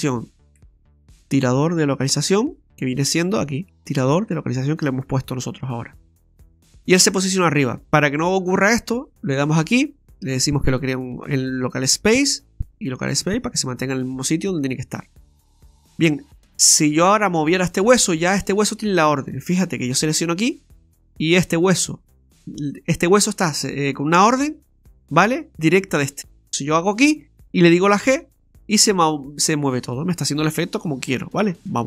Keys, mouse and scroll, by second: 9.4 click, 12.4 click, 15.9 right click, 20.1 right click, 26.2 right click, 26.8 right click, 28.1 g.